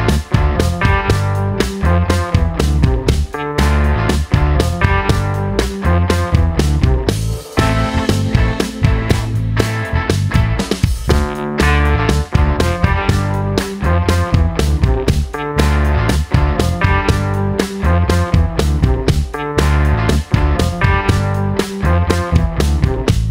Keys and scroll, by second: 2.0 super+c, 2.1 super+v, 5.4 l, 9.5 BackSpace, 9.7 BackSpace, 9.9 BackSpace, 11.4 super+d, 14.0 super+d, 14.2 super+d, 14.3 super+d.